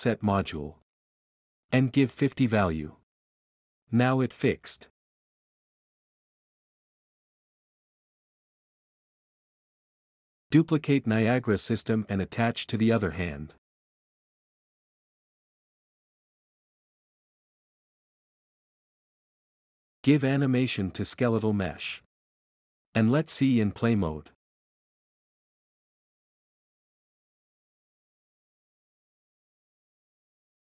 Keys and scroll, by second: 0.0-2.6 typing, 5.4 d, 5.9 d, 6.4 d, 10.5 ctrl+c, 10.6 ctrl+v, 14.6-15.6 typing, 21.5-23.5 typing, 24.5 Return, 27.6-28.4 typing.